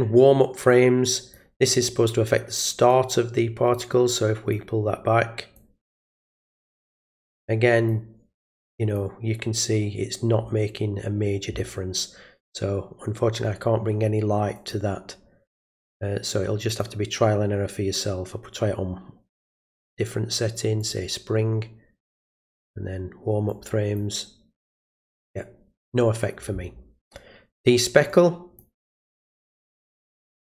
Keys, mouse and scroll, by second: 0.7 click, 2.9 click, 4.1-4.5 drag, 5.6 click, 6.4 click, 7.4 click, 8.6-9.0 drag, 14.6 click, 16.7 click, 19.5 click, 20.8 click, 23.5 click, 24.7 click, 28.1 click, 29.1 click.